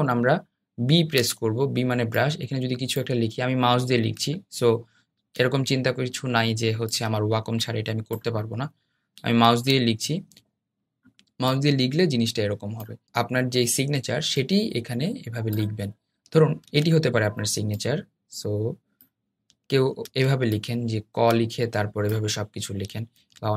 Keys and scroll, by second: 1.4 b.